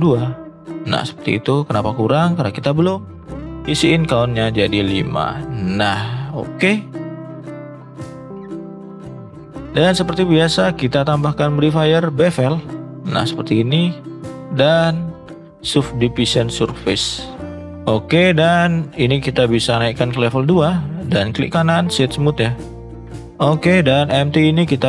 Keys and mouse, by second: 2.4 click, 3.8 click, 4.1 click, 4.5 click, 5.3 click, 5.7 middle drag, 6.6 click, 7.1-7.4 middle drag, 7.7-9.0 middle drag, 9.4 middle click, 10.6 click, 11.1-12.3 drag, 14.1-15.6 drag, 16.5 middle click, 17.2 middle drag, 20.3-20.7 middle drag, 21.3 right click, 22.5-23.0 middle drag.